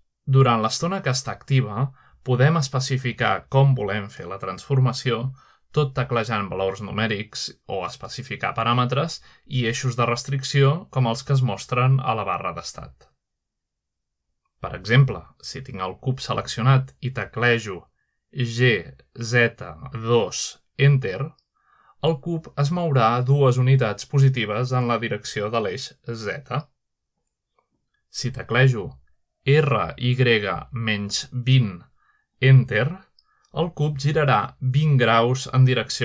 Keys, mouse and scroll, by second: 4.8 middle click, 5.7-6.3 middle drag, 5.9-6.6 scroll down 2, 6.5 middle click, 7.8-8.5 shift+middle drag, 9.5 middle click, 11.6-12.5 shift+middle drag, 13.5 click, 18.5-19.4 typing, 20.6 typing, 21.5 Return, 23.5-24.9 middle drag, 26.7-28.0 middle drag, 28.4-29.3 middle drag, 30.4-32.6 typing, 33.5 Return.